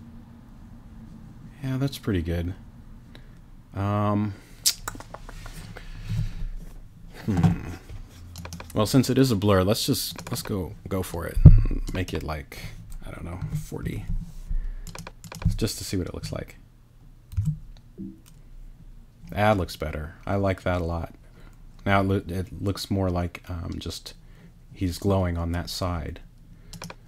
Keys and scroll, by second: 13.4 4, 13.8 0, 17.3 super+r.